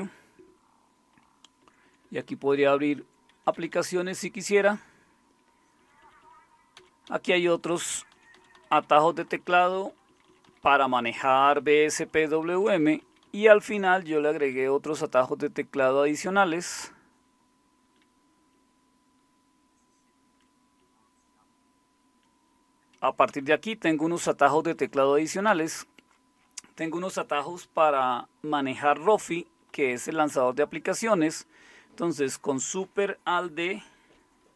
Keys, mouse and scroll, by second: 1.6 Right, 1.8 Right, 2.0 Right, 2.2 Right, 2.4 Right, 2.8 Right, 3.5 Left, 3.7 Left, 4.7 Escape, 5.8 Down, 6.0 Down, 6.2 Down, 6.8 Down, 7.1 Down, 7.3 Down, 7.5 Down, 8.2 Down, 8.4 Down, 8.9 Down, 9.1 Down, 9.3 Down, 9.5 Down, 9.7 Down, 9.9 Down, 10.1 Down, 10.3 Down, 10.5 Down, 10.8 Down, 11.2 Down, 11.4 Down, 11.6 Down, 12.0 Down, 12.0 Down, 12.5 Down, 12.8 Down, 13.0-14.4 Down, 15.9 Down, 16.0 Down, 16.2-18.0 Down, 18.5-22.2 Down, 23.3 Up, 23.5 Up, 24.2 Up, 24.7 Up, 25.5 Down, 29.7 Down, 30.3 Up.